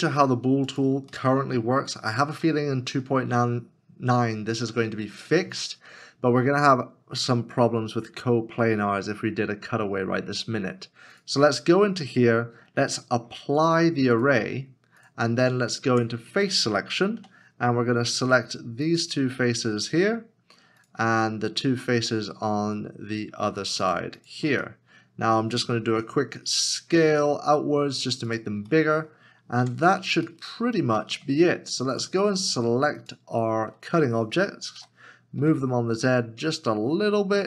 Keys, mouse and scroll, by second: 1.1 middle click, 1.8 scroll up 1, 2.5 middle click, 15.9 middle click, 16.8 Tab, 17.2 3, 20.0 3, 20.8 shift+click, 21.4 middle click, 23.8 shift+click, 24.8 middle click, 25.1 scroll down 1, 27.5 s, 28.7 s, 28.9 middle click, 29.6 Tab, 30.5 middle click, 33.0 shift+click, 34.8 g, 35.4 z.